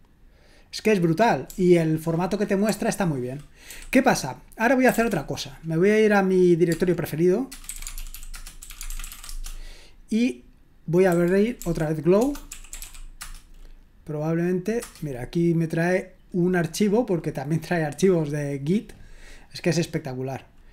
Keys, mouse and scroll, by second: 1.5 typing, 2.6 typing, 3.7-5.5 typing, 7.4-9.6 typing, 11.1-13.3 typing, 14.8 Return.